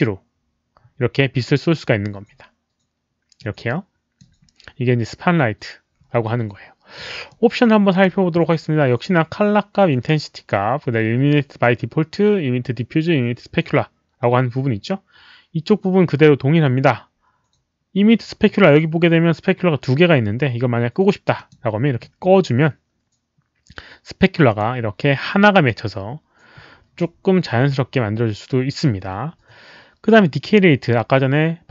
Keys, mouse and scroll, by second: 3.3 click, 7.2 click, 21.3 click, 24.4 click.